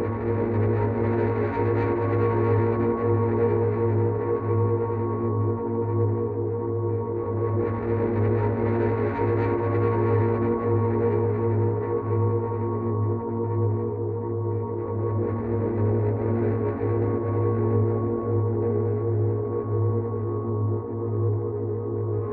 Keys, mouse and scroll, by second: 2.7 click, 8.2 click, 10.3 ctrl+z, 14.2 alt+click, 19.8 ctrl+z.